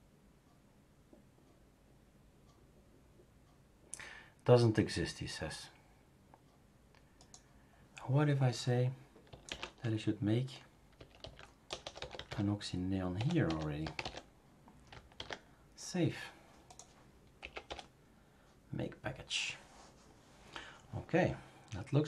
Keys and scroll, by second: 9.5 /, 10.9-14.5 typing, 15.1 ctrl+s, 17.4 Up, 17.6 Return.